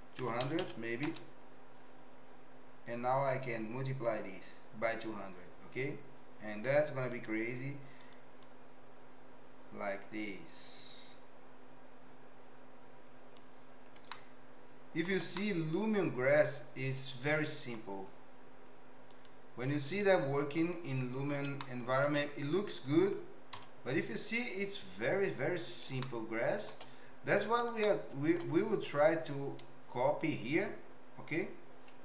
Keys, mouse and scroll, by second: 0.6 KP_0, 7.2 click, 8.6-13.5 drag, 14.2 shift+middle click, 15.4-17.9 middle drag, 19.2 click, 19.9 click, 21.6-22.1 shift+middle drag, 23.5 KP_0, 26.1 shift+middle click, 27.9 shift+middle click.